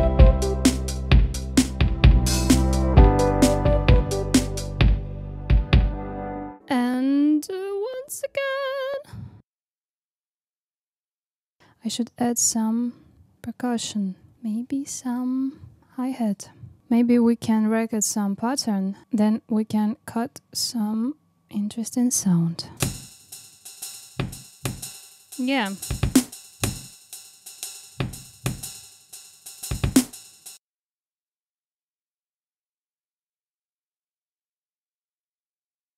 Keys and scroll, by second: 9.4 super+c, 9.6 super+v, 9.8 super+c, 10.7 super+v, 11.1 super+c, 11.3 super+d, 14.1 super+d, 26.6 space, 27.1 space, 30.5 space, 31.0 super+e, 31.2 space, 32.2 space, 33.0 super+x, 34.0 super+v, 34.5 super+d.